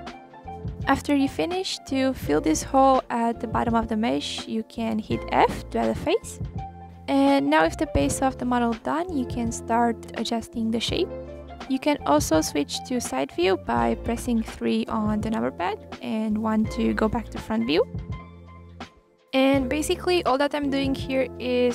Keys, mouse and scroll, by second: 0.0-0.3 scroll up 4, 0.4 middle click, 0.6 scroll down 3, 0.7-1.2 scroll up 1, 1.2 click, 1.3-1.7 scroll down 1, 1.7 e, 4.6 f, 4.8 middle click, 5.0 click, 5.2 scroll down 1, 5.4 scroll up 2, 5.7 click, 6.2 click, 8.6 click, 9.7-10.1 scroll up 1, 10.1 click, 11.7 click, 13.3 click, 14.3 click, 16.5 click, 17.4 click, 17.5 click, 18.5 click, 18.7 g, 20.9 click, 21.2 g.